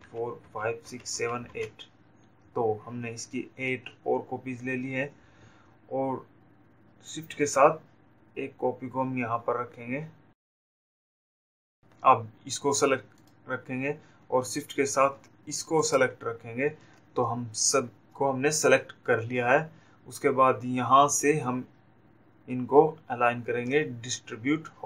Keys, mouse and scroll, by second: 13.4 click, 16.6 shift+click.